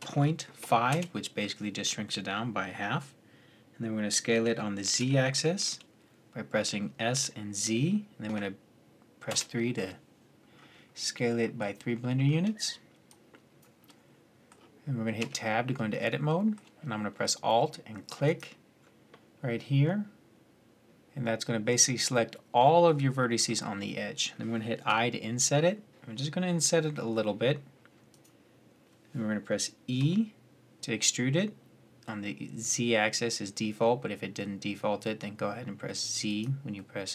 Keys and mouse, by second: 4.1 s, 10.4-11.0 middle drag, 12.0-12.9 middle drag, 12.9-13.7 drag, 13.7-15.0 middle drag, 15.0 Tab, 18.0-22.2 drag, 23.2-27.3 middle drag, 24.7 i, 29.8 e, 36.1 middle click, 36.8 middle click, 37.0 middle click.